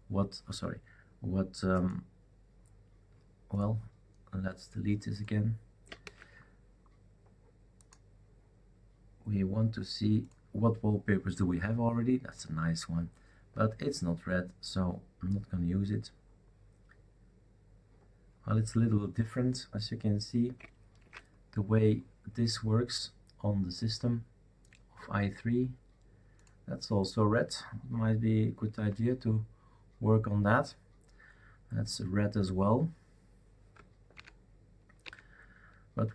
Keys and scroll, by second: 6.0 shift+super+q, 21.0 shift+super+q, 28.8 super+", 34.1 alt+Right, 35.0 alt+Right.